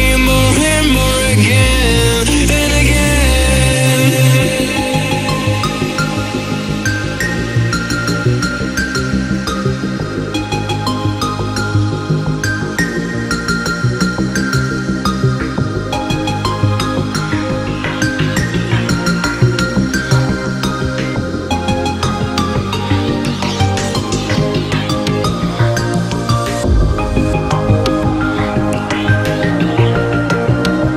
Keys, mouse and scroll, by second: 0.7 ctrl+click, 1.4-5.4 drag, 8.7 space, 8.9 click, 9.0-9.4 space, 9.4 space, 9.9 ctrl+-, 10.4 space, 10.6 click, 10.8-11.4 space, 13.2 click, 17.3 click, 17.4-19.3 typing, 21.5-23.1 typing, 24.2 click, 27.9 BackSpace, 28.7-29.2 click, 30.1 Down.